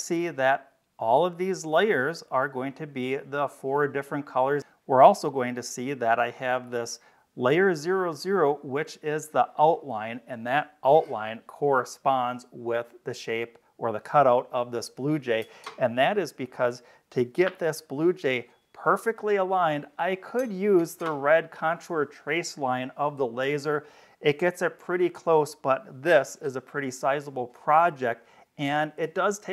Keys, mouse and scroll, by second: 8.5 click.